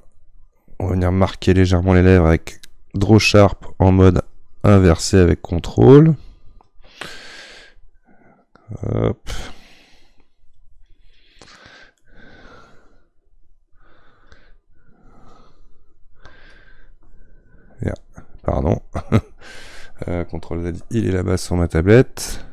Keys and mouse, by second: 12.0-13.5 middle drag, 13.5-20.8 drag, 20.8 ctrl+z, 22.2-22.5 ctrl+drag.